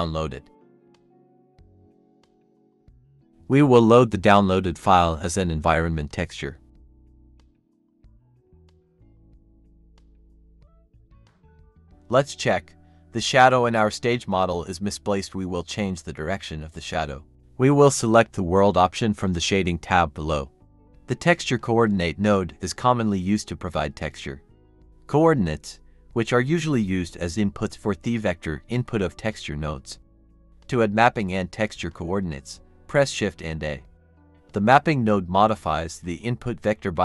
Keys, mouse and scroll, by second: 18.7-19.3 scroll down 1, 19.5 typing, 22.3-22.9 scroll down 1, 22.9-23.4 scroll up 1, 23.4 double click, 24.0 a, 26.9-31.4 typing, 30.6 double click, 32.4 Return.